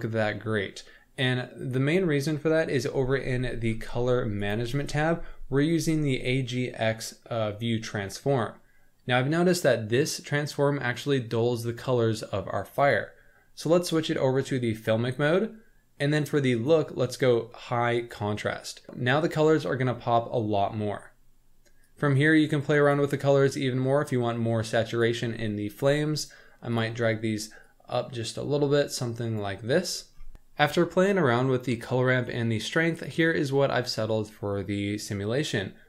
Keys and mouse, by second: 4.4 click, 12.9-15.1 drag, 16.6-18.3 drag, 21.9 click, 26.3 click, 26.7 click.